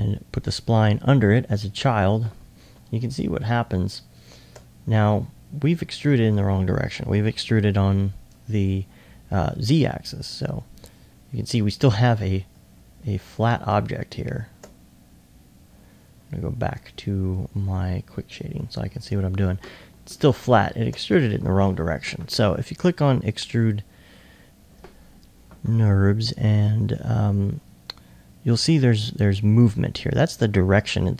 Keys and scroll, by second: 13.2 alt+s.